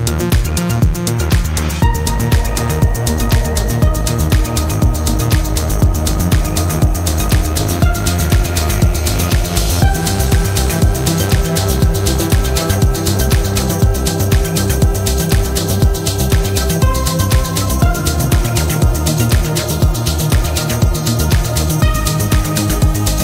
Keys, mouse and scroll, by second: 1.0 click, 4.3 click, 5.8 click, 6.5-6.8 scroll down 2, 7.2-7.5 scroll up 2, 10.4 click, 11.4 click, 12.5-13.2 scroll down 2, 14.1 click, 15.5-15.9 ctrl+scroll up 2, 16.9 ctrl+click, 20.8 click, 22.8 click.